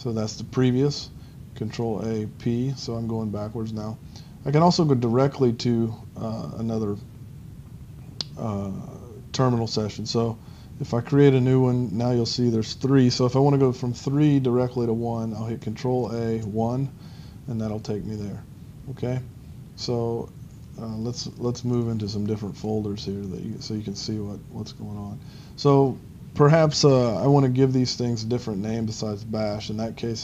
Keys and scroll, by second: 0.4 p, 2.3 p, 4.4 p, 11.3 ctrl+c, 12.2 ctrl+c, 16.4 ctrl+1, 18.4 ctrl+1.